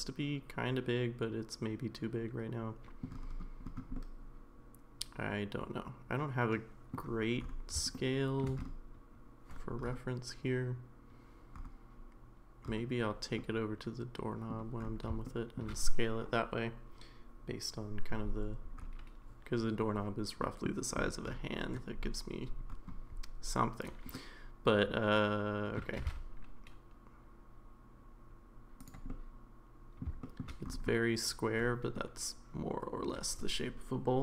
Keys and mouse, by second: 3.9-6.9 middle drag, 7.9 shift+middle click, 13.4-14.5 middle drag, 15.2 shift+middle click, 20.4 middle click, 24.1-25.8 middle drag, 26.0 g, 29.1 middle click, 30.2 shift+middle click, 31.9-34.2 middle drag.